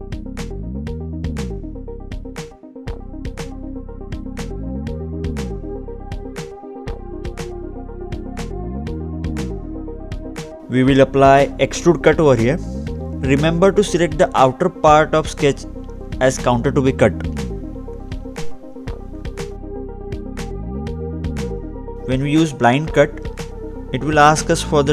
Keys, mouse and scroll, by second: 0.3 scroll down 1, 0.4 click, 1.3 click, 1.6 scroll up 1, 1.8 scroll down 2, 2.5 click, 3.5 click, 4.4 click, 5.7 click, 7.9 click, 10.5 click, 10.9 middle click, 11.8-12.3 scroll down 2, 12.3-12.7 scroll up 2, 13.9 click, 16.5-17.0 scroll down 2, 17.0 scroll up 1, 17.2 middle click, 18.9-19.5 scroll down 1, 19.7 middle click, 21.6 click, 24.8 click.